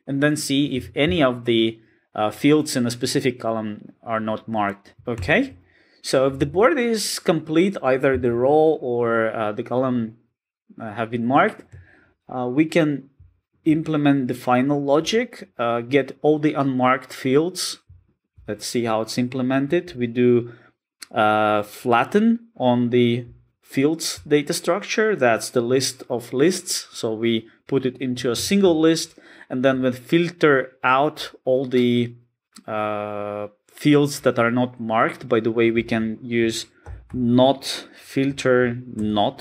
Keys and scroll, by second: 4.9 alt+super+], 9.3 alt+super+[, 13.6 super+b, 18.3 super+b, 39.2 Return.